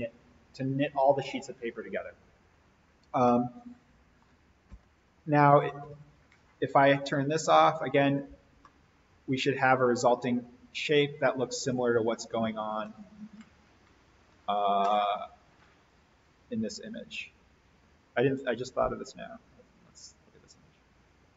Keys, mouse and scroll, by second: 2.9 scroll down 1, 3.2-4.5 middle drag, 4.6 alt+v, 7.0 click, 8.6-12.9 middle drag, 12.8 scroll down 1, 16.9 click, 19.8 click.